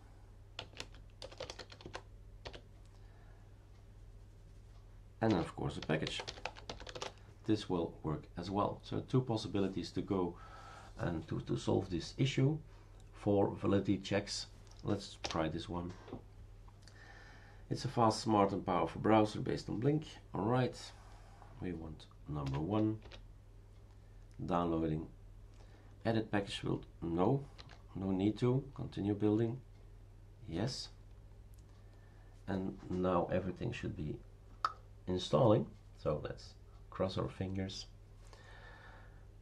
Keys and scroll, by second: 0.0-2.4 typing, 5.3-7.4 typing, 15.2 Return, 22.4 1, 23.0 Return, 27.5 n, 30.5 y.